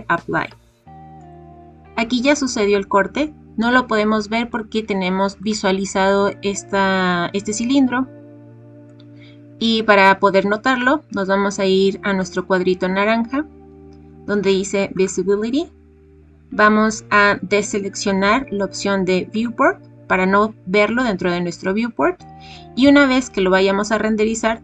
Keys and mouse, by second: 14.9 click, 19.3 click.